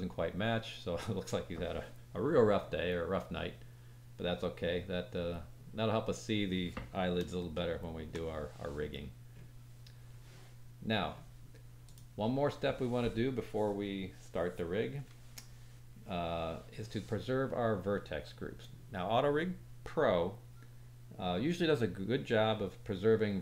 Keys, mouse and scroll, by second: 3.9 scroll down 2, 6.2-7.3 scroll down 1, 7.5 shift+middle click, 9.0-10.6 scroll up 1, 10.9-11.8 scroll down 1, 11.8 click, 15.9-23.4 drag.